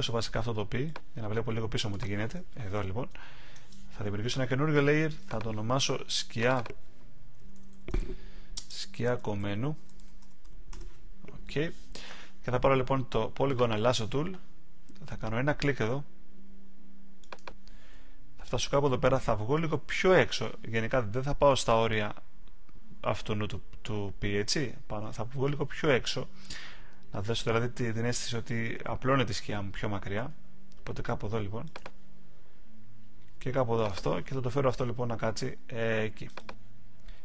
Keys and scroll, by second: 7.5 shift+s, 8.9 shift+k, 10.7 Return.